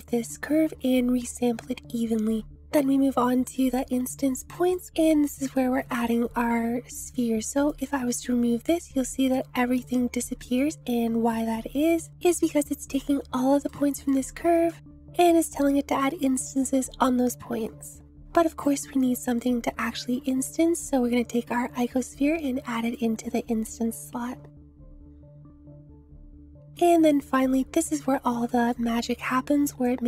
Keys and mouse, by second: 6.7-9.2 drag, 10.7-12.0 drag, 13.6 click, 14.8 click, 19.0-22.9 drag, 26.7 click, 27.6 middle click, 28.6 middle click, 29.8-30.0 drag.